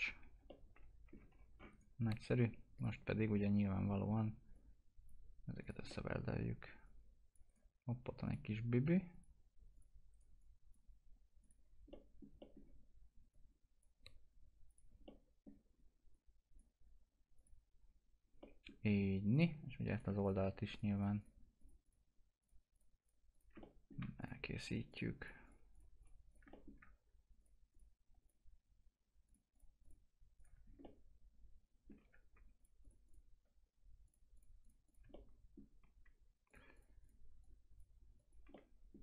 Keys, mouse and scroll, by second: 0.2 alt+q, 0.5 alt+middle click, 1.4 scroll up 1, 1.7 right click, 2.2-2.8 scroll down 1, 2.8 click, 3.1-4.0 scroll up 1, 4.5 click, 5.9 middle click, 6.8 click, 7.5 right click, 8.3 click, 10.1 right click, 10.4 click, 11.7 scroll down 1, 11.9 middle click, 13.3 click, 15.0 middle click, 15.7-16.1 scroll up 1, 16.1 click, 17.8-18.4 scroll down 1, 18.4 middle click, 19.3 click, 23.6 middle click, 24.2 ctrl+click, 26.5 middle click, 27.4 ctrl+click, 30.6 scroll down 1, 30.8-32.6 alt+middle drag, 32.6 ctrl+click, 35.0 ctrl+click, 35.1-36.5 alt+middle drag, 36.5 alt+click, 38.5 alt+middle click.